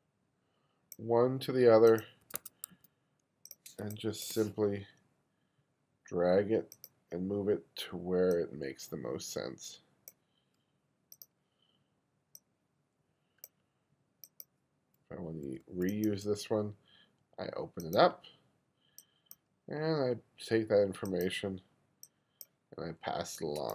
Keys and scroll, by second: 2.3 1, 3.9 space, 15.5 2.